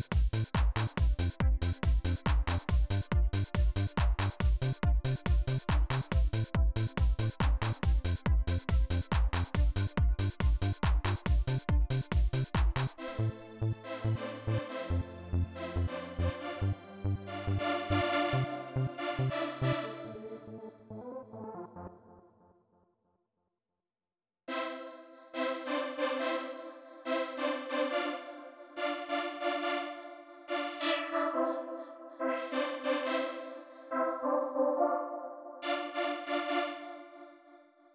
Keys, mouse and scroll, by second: 10.4 click, 12.0 click, 15.4 click, 17.0-20.6 drag, 21.6 space, 22.5 click, 24.2 space, 25.2 click, 30.2-35.8 drag, 36.5 space, 37.0 click.